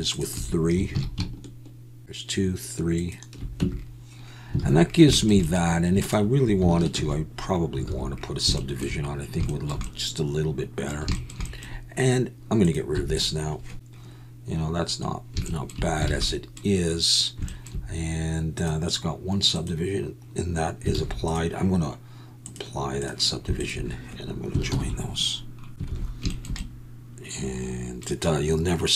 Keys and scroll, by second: 0.9 ctrl+b, 3.6 Tab, 4.6 alt+a, 7.0 ctrl+1, 7.8 alt+a, 12.9 x, 16.0 alt+a, 20.9 alt+a, 24.7 ctrl+j, 25.9 alt+a.